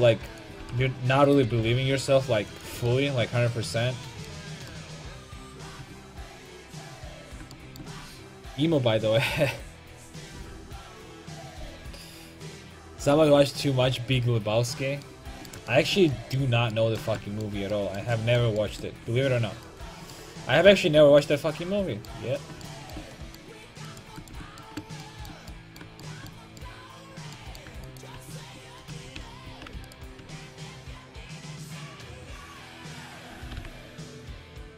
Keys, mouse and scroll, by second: 0.4-2.6 drag, 0.6 g, 1.4-2.9 right drag, 1.5 r, 2.8 a, 2.9 middle click, 5.8 Tab, 19.7 right click, 19.9 Tab, 23.9 right click, 24.1 Tab, 24.4 Tab, 27.8 Tab, 27.9-31.5 drag, 28.2 Tab, 28.9 a, 29.3 a, 29.5 a, 33.6 g.